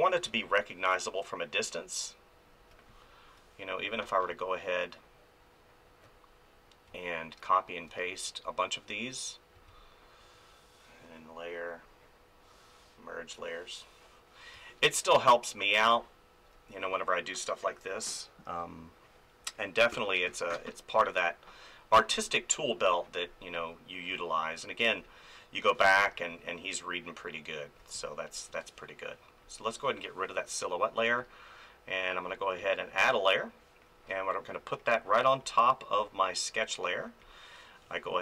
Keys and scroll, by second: 14.5 space, 25.8 space.